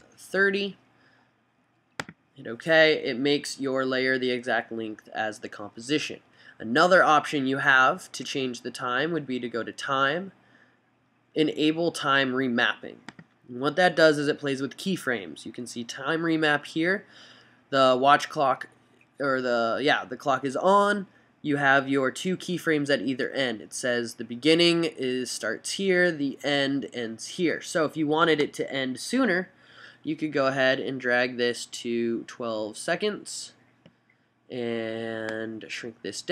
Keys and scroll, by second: 0.0-0.6 typing.